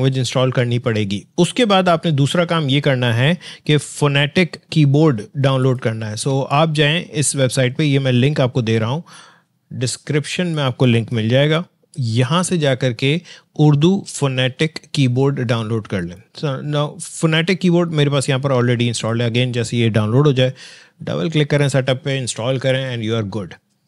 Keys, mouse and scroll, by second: 5.6 click, 5.9 click, 10.5-12.0 drag, 15.9 click, 18.9 click, 19.0 click.